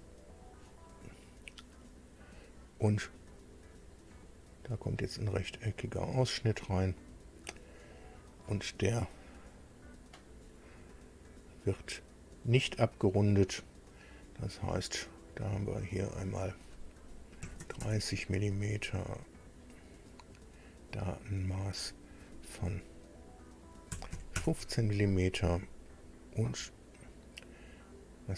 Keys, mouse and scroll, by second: 3.9 click, 5.0 click, 6.2 click, 7.0-7.7 scroll up 4, 8.5 right click, 10.2 click, 16.1 click, 17.4 KP_3, 17.6 KP_0, 17.8 KP_Enter, 19.3 click, 21.7 click, 23.9 KP_1, 24.1 KP_5, 24.3 KP_Enter.